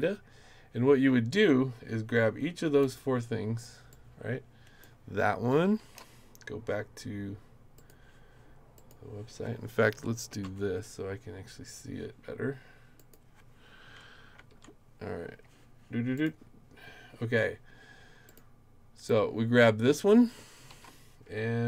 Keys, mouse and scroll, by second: 2.9 click, 3.9 click, 5.8 ctrl+c, 7.8 click, 8.7 click, 10.4 super+Right, 13.0 click, 14.5 super+Left, 16.2 click, 18.3 click, 19.1 click, 20.7 ctrl+c.